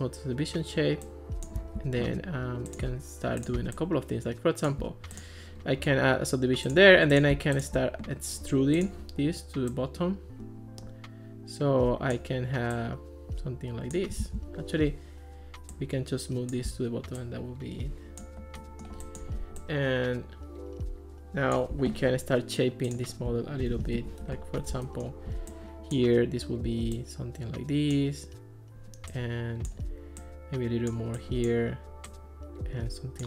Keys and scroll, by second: 14.2 super+z, 24.0 alt+r.